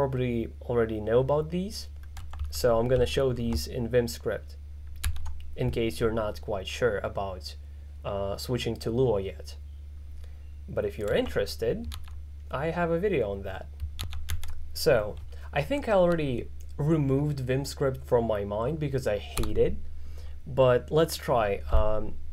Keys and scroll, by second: 5.1 shift+s, 19.4 o.